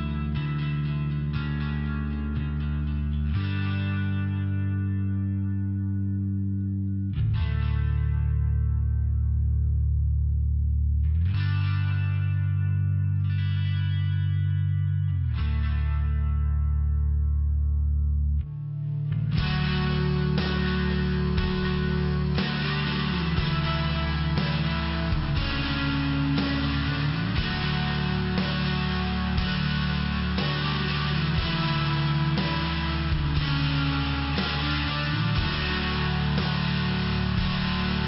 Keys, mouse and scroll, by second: 2.7 click, 7.3 click, 8.4 click, 9.4 click, 10.6 click, 11.4 click, 14.9 click, 15.7 click, 16.7 click, 17.4 click, 18.8 click, 20.7 click, 21.4 click, 24.5 click, 26.4 click, 27.0 click, 28.6 click, 29.6 click, 31.9 click.